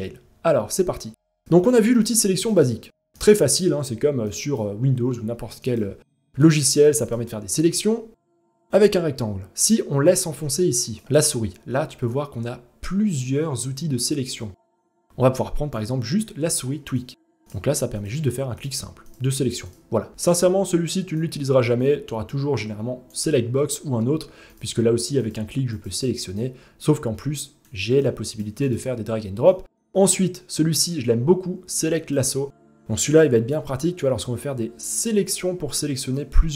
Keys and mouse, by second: 0.9 click, 2.5 click, 3.9 click, 5.7 click, 6.3 click, 6.7-9.3 drag, 9.7 click, 11.0-15.4 drag, 16.6 click, 17.0-17.6 drag, 18.2 click, 18.6 click, 19.2 click, 20.8-22.8 drag, 25.4-27.2 drag, 27.7 click, 29.2-31.8 drag, 32.7-34.9 drag, 35.9-36.5 drag.